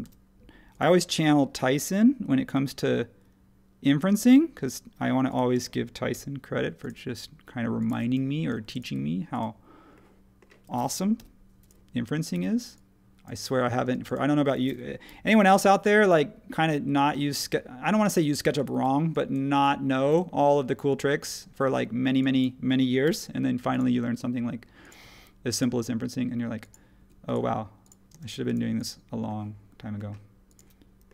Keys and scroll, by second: 0.0 m, 5.5 space, 6.1 l, 7.9 e, 8.5 space, 11.1 l, 12.3 e, 13.8 space, 15.0 p, 18.4 typing, 23.0 |, 25.0 Escape, 27.0 Escape, 28.1 space.